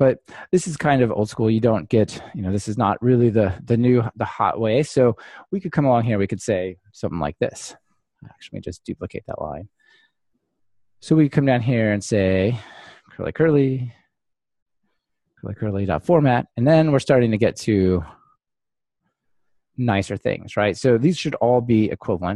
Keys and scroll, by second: 8.9 super+x, 10.3 super+d, 21.7 ctrl+r.